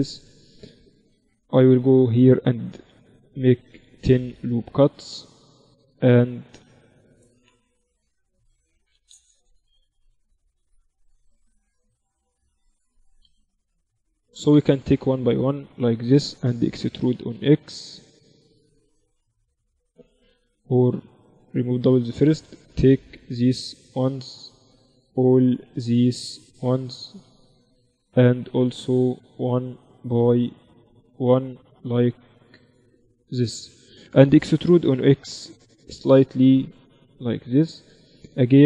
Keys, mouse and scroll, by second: 1.0 Tab, 1.4 Tab, 1.8 ctrl+r, 5.1-10.2 middle drag, 10.2-12.6 drag, 10.9-12.8 right drag, 11.8-13.3 middle drag, 13.3-17.8 right drag, 17.0 e, 20.6 a, 20.8 a, 21.0 w, 22.5-35.4 right drag, 23.9 a, 34.8 e.